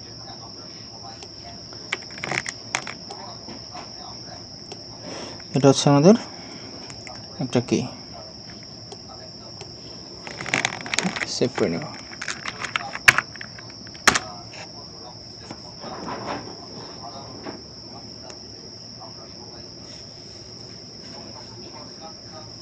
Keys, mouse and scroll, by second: 2.4 ctrl+middle click, 3.1 ctrl+middle click, 9.0 middle click, 11.0 ctrl+s, 12.5 typing, 14.1 Return.